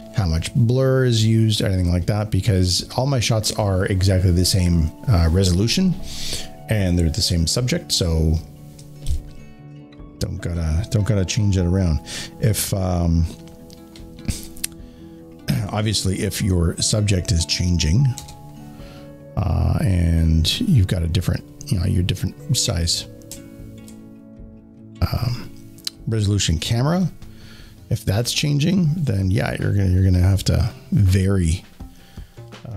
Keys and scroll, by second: 18.1 alt+shift+5.